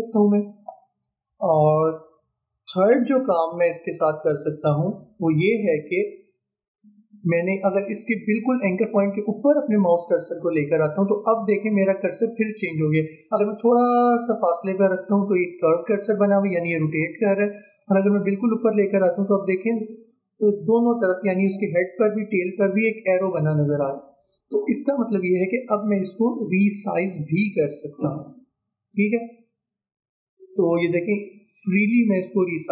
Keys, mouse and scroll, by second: 6.0 ctrl+z, 16.4-17.7 drag, 17.7 ctrl+z, 25.4-32.7 drag.